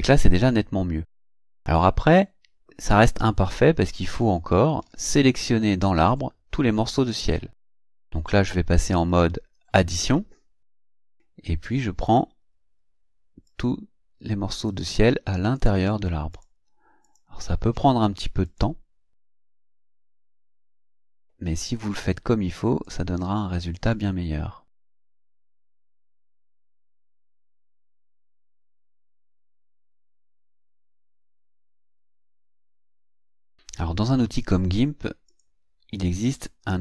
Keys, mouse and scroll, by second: 3.5-4.1 ctrl+scroll up 4, 4.9 ctrl+scroll up 2, 5.6 ctrl+scroll up 2, 9.1 click, 9.9 click, 11.1 click, 12.1 click, 13.5 click, 14.7 click, 15.5 click, 16.4 click, 17.1 click, 18.5 click, 19.8 click, 22.9 click, 23.9 click, 25.2 click, 26.6 click, 27.9 click, 29.0 click, 29.9 click, 30.7 click, 31.6 click, 32.3 click, 33.2 click, 34.4 click, 35.3 click, 36.3 click.